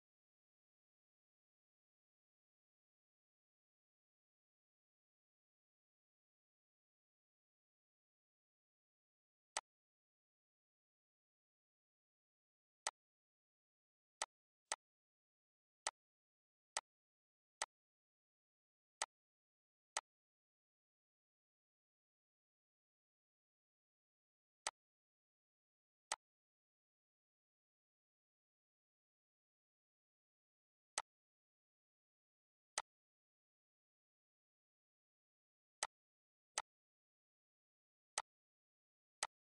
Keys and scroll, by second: 28.5 ctrl+d, 33.1 ctrl+d.